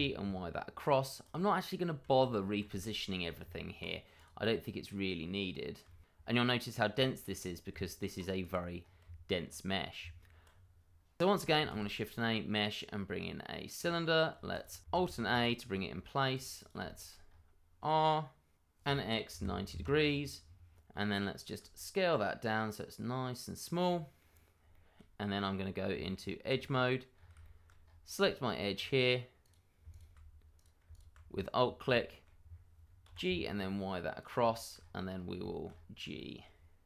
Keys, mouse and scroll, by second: 0.8 click, 1.3 double click, 2.0 shift+z, 3.0 middle click, 3.4 Tab, 4.1 click, 4.5 middle click, 5.8 shift+middle click, 5.9 middle click, 6.0 shift+middle click, 6.1-7.7 scroll up 2, 7.7 scroll down 1, 7.9 shift+middle click, 8.2 scroll up 1, 8.4 Tab, 9.0 click, 9.3 scroll up 1, 9.4 Tab, 10.5-11.3 scroll down 1, 11.6 shift+a, 13.8 click, 14.9 alt+a, 15.4 shift+middle click, 15.6-16.3 scroll up 1, 16.3 click, 16.7 double click, 16.8 shift+middle click, 16.9 middle click, 17.2-18.5 scroll up 1, 19.2 9, 19.7 Return, 20.4-21.6 scroll down 1, 21.6 s, 23.5 click, 23.9 middle click, 24.2 scroll up 1, 24.7 shift+middle click, 25.9 Tab, 27.1 scroll up 1, 27.4 middle click, 27.8-28.1 scroll up 1, 28.5 scroll up 1, 29.4 click, 29.9 alt+click, 29.9 click, 31.2-31.6 scroll down 1, 31.9 shift+middle click, 32.4-32.8 scroll down 1, 33.0 g, 33.2 y, 34.2 click, 34.5 shift+middle click, 34.5 middle click, 34.8-35.1 scroll up 1, 35.7-36.1 scroll up 1, 36.1 shift+middle click.